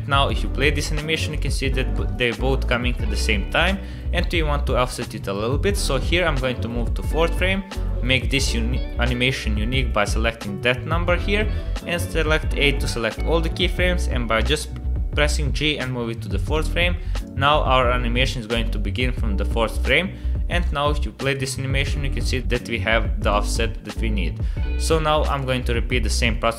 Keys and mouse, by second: 0.3 click, 0.6 space, 2.0 space, 2.2 click, 5.9 click, 8.2 click, 11.4 a, 14.4 g, 17.2-20.6 drag, 21.2 click, 21.2 space, 21.8 click, 23.2 click, 23.9 click, 24.4 space.